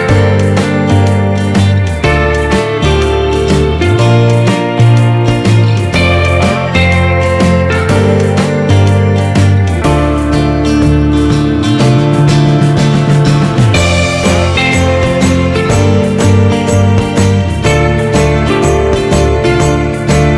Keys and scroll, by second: 5.3 ctrl+-, 16.4 ctrl+z.